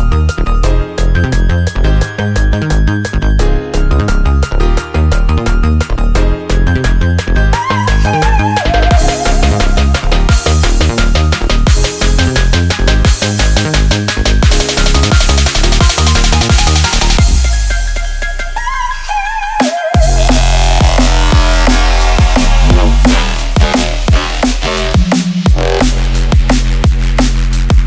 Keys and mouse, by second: 0.4 shift+middle drag, 1.0-1.4 drag, 2.0 shift+d, 3.4 r, 6.2-6.6 shift+middle drag, 6.7-7.2 middle drag, 7.4 middle click, 7.9-8.3 middle drag, 8.5 shift+middle click, 9.0-12.7 middle drag, 15.0 middle click, 15.5-15.8 shift+middle drag, 16.2-16.5 ctrl+middle drag, 16.9 shift+middle click, 17.8-19.0 middle drag, 19.2-19.5 shift+middle drag, 19.8-20.3 middle drag, 21.1-21.5 middle drag, 23.6-24.2 shift+middle drag, 24.4-25.4 middle drag, 25.7 shift+middle click, 26.2-26.9 middle drag, 27.1 shift+middle click, 27.6-27.8 middle drag.